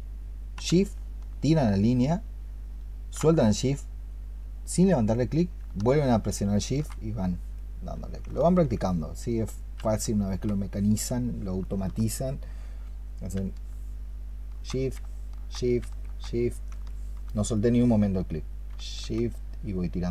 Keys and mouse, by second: 8.3 alt+click, 11.5 alt+click, 16.8 alt+click.